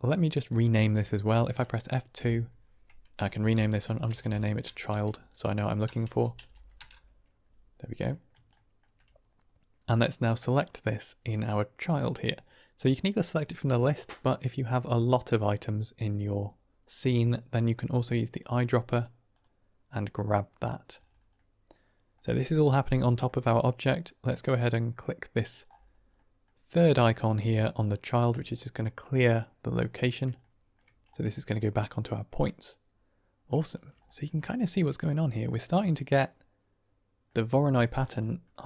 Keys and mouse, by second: 2.1 F2, 4.7 BackSpace, 8.0 drag, 8.6 shift+click, 13.0-15.3 drag, 21.4-22.2 drag, 23.1 drag, 26.2 middle click, 28.2 click, 30.0 middle click, 30.3-30.6 shift+middle drag, 31.5-33.4 middle drag, 33.5-33.9 shift+middle drag, 34.5 shift+middle drag, 35.1 middle click, 36.0-37.2 middle drag, 38.2 middle click.